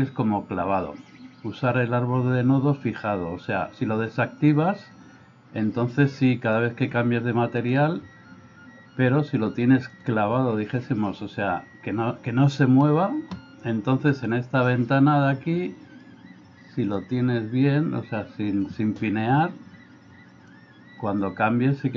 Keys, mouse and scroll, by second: 4.5 click, 7.6 click, 14.2 click, 17.2-18.8 drag, 20.7 click.